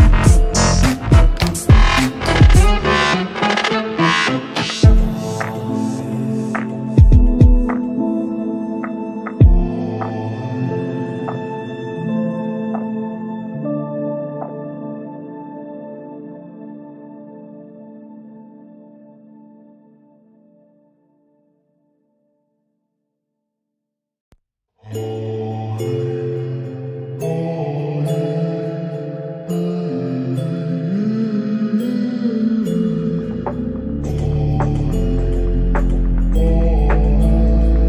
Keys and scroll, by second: 0.5 ctrl+z, 14.2 Delete, 16.1 Delete, 18.5 Delete, 22.8 Delete, 29.8 g.